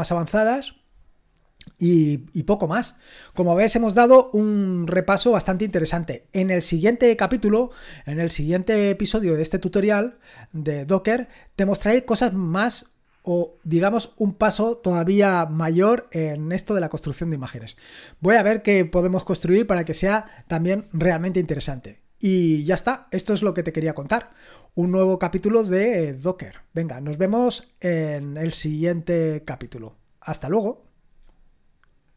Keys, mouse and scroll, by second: 3.7-4.3 scroll down 1, 4.3 scroll up 1, 5.0-32.1 scroll down 1, 32.1 click.